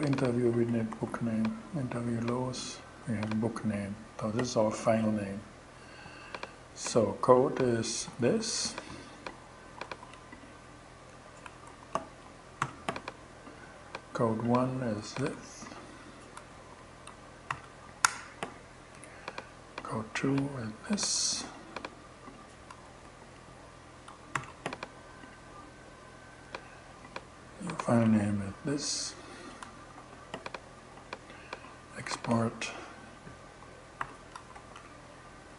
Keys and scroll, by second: 0.4 super+c, 2.5 super+v, 7.7 super+c, 9.3 super+c, 10.9 Return, 11.1 super+v, 11.7 shift+super+v, 12.0 shift+super+,, 14.6 super+c, 15.8 super+Return, 16.0 super+v, 16.5 shift+super+v, 16.9 shift+super+,, 17.5 shift+Return, 18.1 Return, 20.4 super+c, 22.1 Return, 22.5 super+v, 23.5 shift+super+v, 23.8 shift+,, 27.2 super+c, 29.0 Return, 29.4 super+v, 31.6 super+c, 33.4 shift+,, 33.8 shift+Return, 34.0 super+v, 35.0 super+Return.